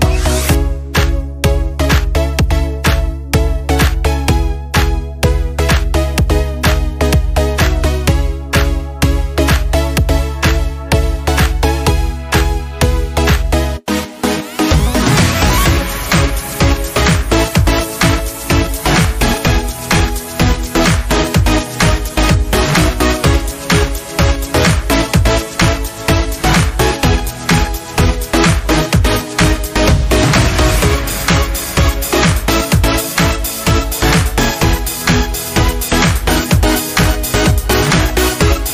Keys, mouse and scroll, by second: 2.3 click, 6.2-10.2 drag, 14.3 click, 17.1 click, 22.0-24.2 drag, 26.6 right click, 29.1 click, 29.8-30.2 scroll up 1, 30.2 space, 30.3 click, 30.5 space, 32.0-35.3 drag, 35.3 click, 37.0 click.